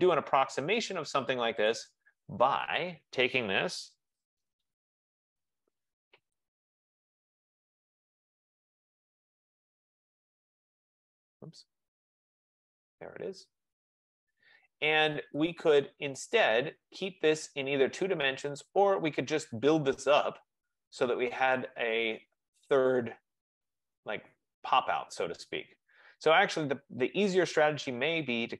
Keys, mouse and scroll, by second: 1.8 click, 3.6-4.9 typing, 6.5 click, 7.6-9.7 typing, 11.7 typing, 13.0 click, 14.2 Escape, 14.3 Escape, 14.6 Escape, 14.8 typing, 15.6 click, 20.1 click.